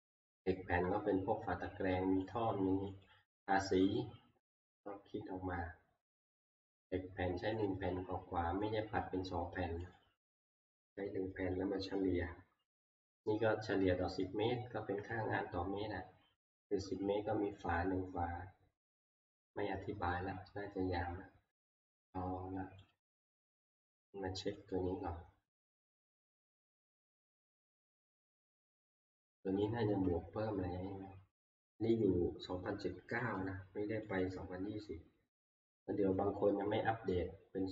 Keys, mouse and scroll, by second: 0.5 click, 2.3 click, 3.1 click, 7.7 click, 9.0 click, 10.0 click, 19.5 click, 22.9 click, 24.9 click, 26.8 click, 29.5 middle click, 33.4 click, 34.3 click, 34.3 middle click.